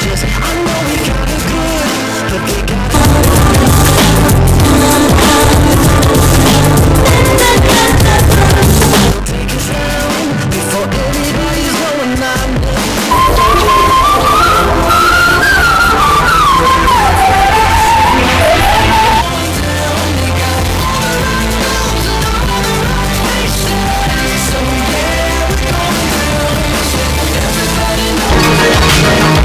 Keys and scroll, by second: 9.1 Page_Down, 19.5 Page_Down.